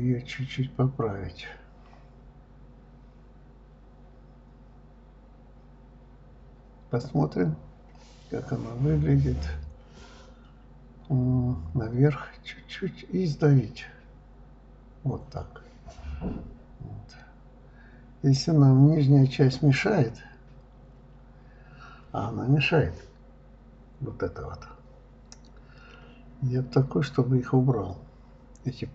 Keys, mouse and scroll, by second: 1.2 ctrl+z, 1.6 click, 3.1-4.6 drag, 5.5-7.1 drag, 7.2 click, 8.1 click, 8.7 shift+click, 8.8 shift+click, 10.2 g, 13.2 s, 15.1-16.6 middle drag, 17.6 shift+click, 17.8 shift+click, 18.2 shift+click, 18.3 shift+click, 20.5 g, 21.7 click, 22.0-23.5 middle drag, 25.4 click, 25.7 click, 26.7 click, 27.2 click, 27.6 middle click, 28.5 click.